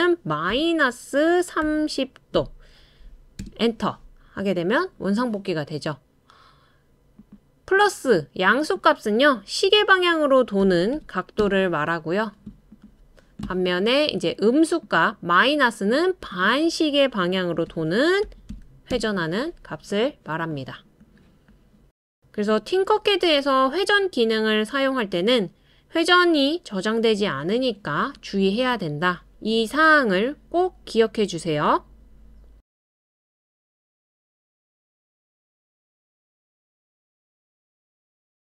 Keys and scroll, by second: 0.3-2.3 typing, 3.4 Return, 5.2-5.9 typing, 10.6-11.4 typing, 17.7-18.9 typing.